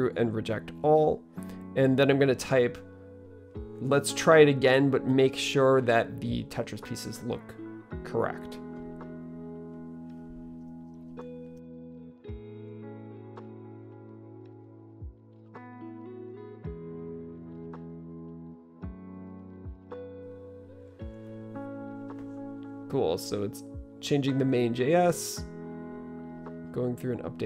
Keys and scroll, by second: 6.7-20.2 typing.